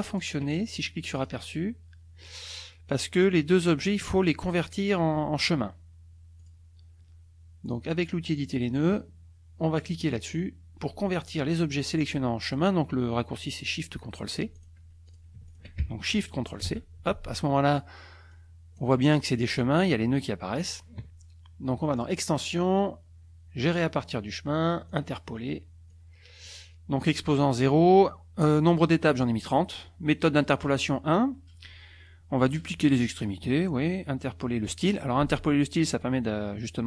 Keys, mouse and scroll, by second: 1.2 click, 6.4 click, 8.4 click, 14.5 click, 15.1 click, 15.5 shift+click, 16.6 ctrl+shift+c, 18.3 click, 22.0 click, 24.9 click, 25.9 click.